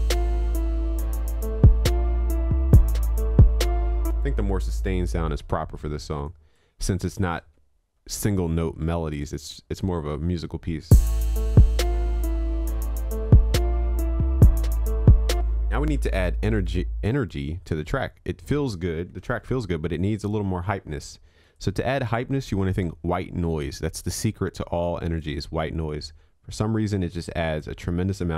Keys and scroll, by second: 7.4 ctrl+s, 19.4 ctrl+s.